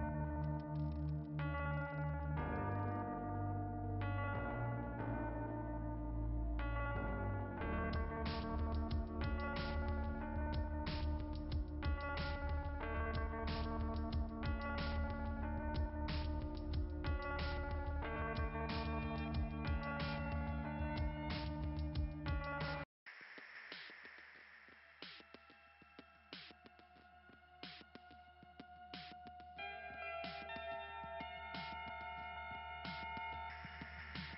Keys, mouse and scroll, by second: 5.6-6.2 scroll down 2, 7.8 click, 8.0 click, 8.3 click, 12.9 click, 13.0 click, 13.3 click, 13.7 click, 17.5 scroll up 3, 24.0-24.3 scroll up 2, 26.0 click, 26.9 click, 28.9 click, 30.0 click, 31.4 click, 33.1 click.